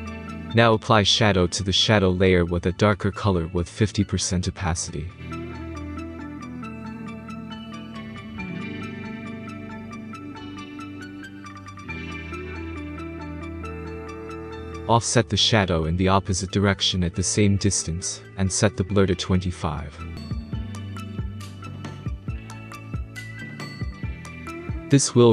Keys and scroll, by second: 10.8-11.2 typing, 11.7 Return, 16.8-17.7 typing, 18.5 Tab, 19.0-19.9 typing, 20.0 Tab, 21.1-22.2 typing, 22.4 Return, 24.9 space.